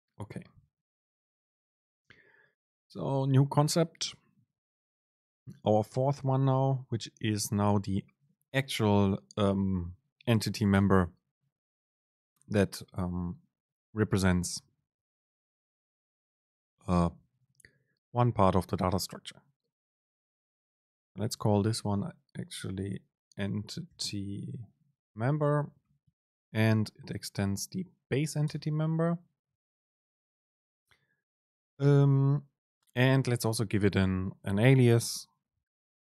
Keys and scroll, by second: 26.6 super+space.